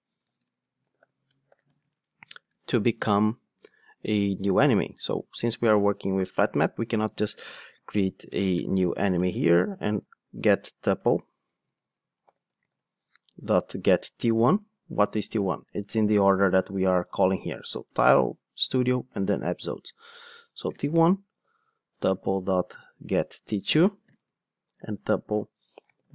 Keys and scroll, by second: 9.2 Return, 11.6 super+z, 14.2 Return, 21.9 Return.